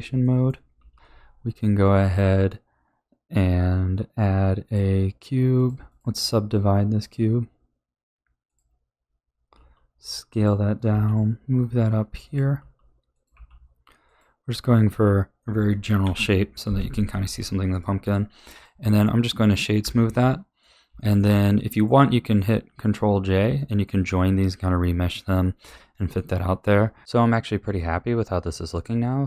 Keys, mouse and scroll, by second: 0.2-0.9 middle drag, 0.9 ctrl+s, 0.9 shift+a, 5.5 click, 5.8-9.5 drag, 9.5 s, 10.9 g, 12.5 s, 13.3 g, 14.4-16.0 middle drag, 16.0 KP_1, 17.1-17.7 middle drag, 17.7-19.0 right drag, 19.0-19.8 middle drag, 19.8 a, 20.1-29.2 middle drag.